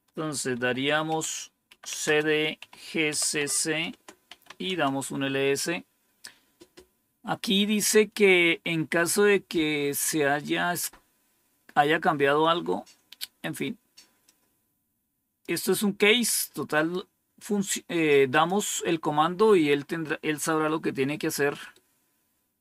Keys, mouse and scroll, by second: 0.4-4.9 typing, 3.8 Return, 14.2-15.3 drag, 16.6 right click, 18.2 click, 19.9 scroll down 1, 21.6-22.6 right drag.